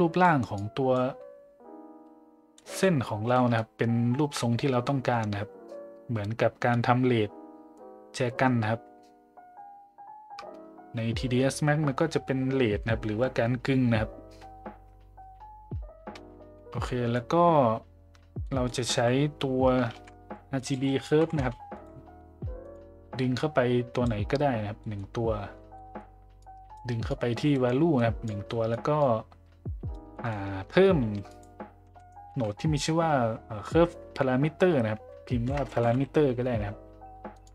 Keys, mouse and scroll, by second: 0.6 click, 2.6 middle click, 3.3 middle click, 16.9 middle click, 18.4 middle click, 19.9 shift+a, 23.4-24.1 drag, 24.8 middle click, 25.8 middle click, 26.4 click, 27.1-27.6 drag, 28.0-28.3 drag, 28.4 click, 29.0 click, 30.1 middle click, 31.0 shift+a, 35.6 BackSpace.